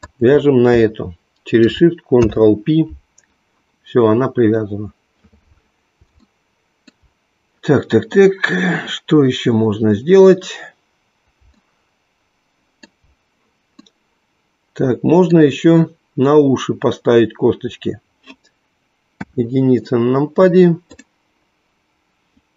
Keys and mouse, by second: 2.2 ctrl+p, 6.3 shift+middle click, 12.3 shift+middle click, 13.9-15.4 middle drag, 19.0 KP_1, 20.9 click.